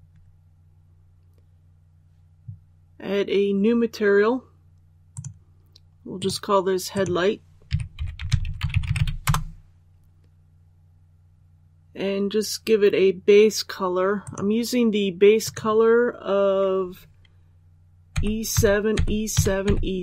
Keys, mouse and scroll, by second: 5.1 click, 7.6-8.9 typing, 9.2 Return, 14.2 click, 18.1-20.0 typing.